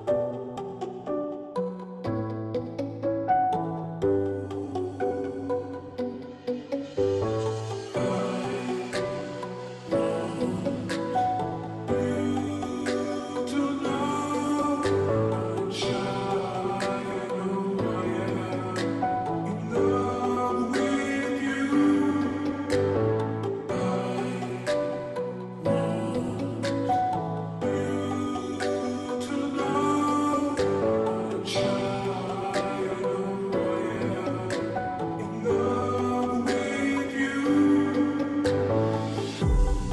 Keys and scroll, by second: 22.1 ctrl+t, 36.1 Return, 36.1 ctrl+t.